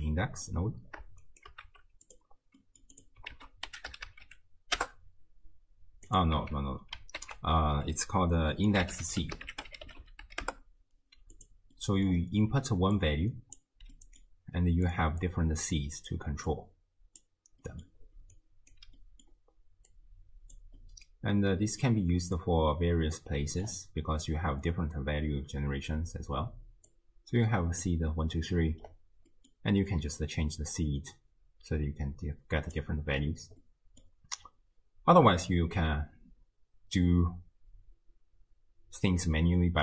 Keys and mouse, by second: 1.3 shift+click, 1.7 g, 2.6-3.0 middle drag, 3.0 click, 3.4 ctrl+a, 4.1 o, 6.4 x, 7.2 ctrl+a, 10.0 e, 11.8 drag, 12.5-13.8 d, 13.0 click, 14.0-14.3 drag, 14.0-14.3 right drag, 14.9 click, 16.5 click, 17.6 middle drag, 18.2 d, 18.4 click, 18.8 d, 19.0 middle drag, 20.0-20.6 drag, 20.8-21.8 middle drag, 22.4-23.3 drag, 23.4 middle drag, 26.9-27.9 drag, 28.6 middle drag, 29.3 middle click, 30.2-32.8 drag, 33.6 middle click.